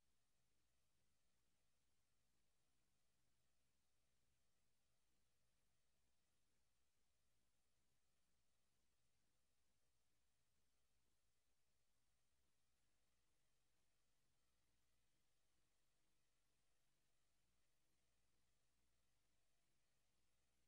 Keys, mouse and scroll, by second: 12.7 Escape, 13.7 scroll down 1, 15.1 KP_0, 17.5 right click, 19.8 click.